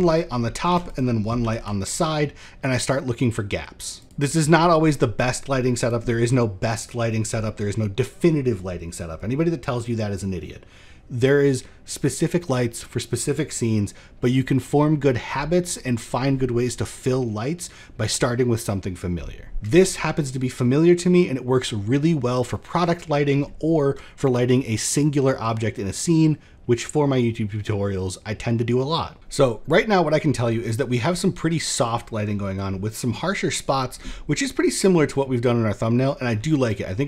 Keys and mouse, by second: 0.3 shift+d, 0.9 r, 4.0-5.4 drag, 30.3 click, 30.3 middle click, 35.4 middle click.